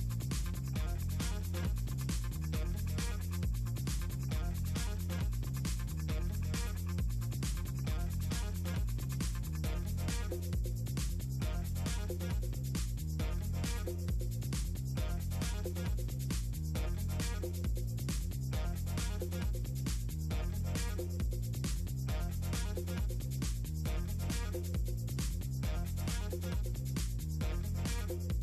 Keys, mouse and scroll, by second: 0.5 click, 0.9 Delete, 2.0 click, 3.2 drag, 3.7 click, 4.8 middle click, 5.1 middle click, 5.6 middle click, 6.2 click, 6.7 click, 7.1 middle click, 7.2 click, 8.2 middle click, 8.3 click, 8.9 shift+click, 9.9 middle click, 10.0 ctrl+scroll down 2, 10.3 middle click, 10.5 middle click, 10.8 middle click, 11.1 click, 11.3 middle click, 11.5 click, 11.9 ctrl+click, 12.3 ctrl+scroll up 2, 12.7 click, 12.8 middle click, 13.0 click, 13.3 click, 13.7-14.0 ctrl+scroll up 2, 14.9 shift+click, 16.1 ctrl+click, 16.5 click, 16.7 ctrl+click, 17.0 ctrl+click, 17.3 click, 18.3 middle click, 20.1 Delete, 21.0 click, 21.4 middle click, 22.7 ctrl+s, 23.1 middle click, 23.3 click, 25.0 ctrl+click, 25.8 middle click, 26.3 ctrl+click, 26.6 ctrl+click, 27.1 ctrl+drag, 27.5-27.8 drag.